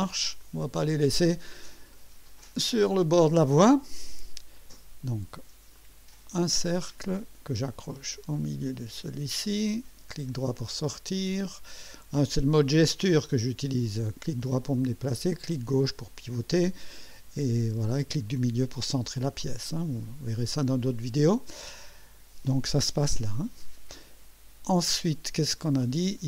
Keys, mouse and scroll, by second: 0.4 click, 1.8 scroll up 1, 2.4 right click, 5.7 click, 7.5 click, 8.9 click, 9.7 right click, 14.2-15.2 right drag, 15.3-16.9 drag, 26.2 right click.